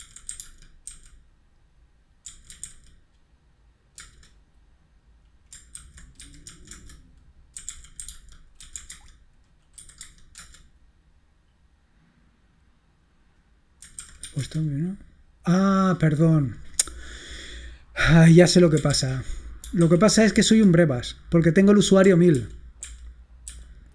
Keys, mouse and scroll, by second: 0.0-0.9 typing, 2.1-3.1 typing, 4.1 Return, 5.6-10.4 typing, 13.8-14.8 typing, 18.7-20.5 typing, 22.4 ctrl+p, 22.9 ctrl+p, 23.6 ctrl+p.